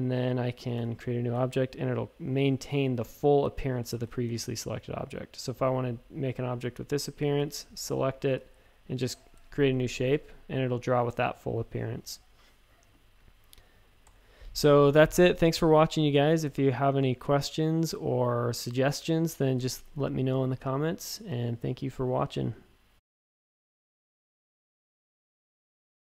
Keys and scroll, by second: 0.5-1.2 typing, 3.2 a, 3.9 shift+super+a, 4.2 space, 7.3 typing, 9.3 shift+super+a, 9.7 space, 10.2 a, 12.7 typing, 14.0 BackSpace.